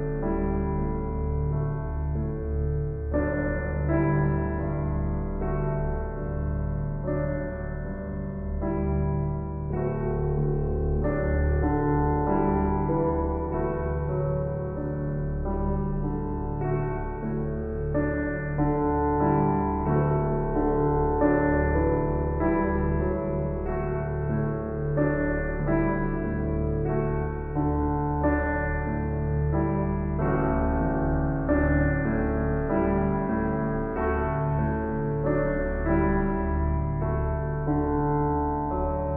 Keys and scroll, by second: 8.3 [, 33.1 ctrl+j, 34.8 ctrl+t.